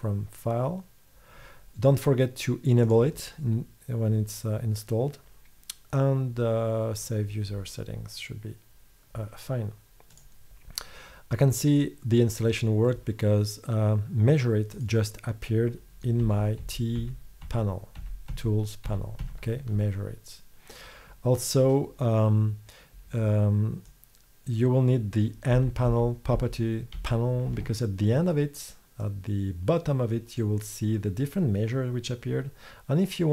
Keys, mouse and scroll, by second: 14.8-16.3 drag, 16.7 t, 17.6 t, 18.4 t, 19.3 t, 25.6 n, 26.0 n, 26.5 n, 27.1 n, 29.1-32.9 drag.